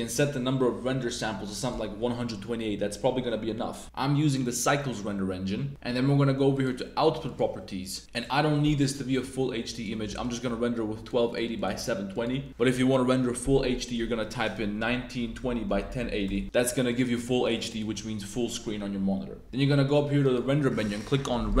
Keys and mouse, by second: 0.9 click, 6.5 click, 7.2 click, 9.7-11.5 drag, 11.8 click, 12.5-16.4 drag, 15.9 0, 16.3 BackSpace, 16.6 click, 17.1 click, 17.8 click, 20.2-21.6 drag.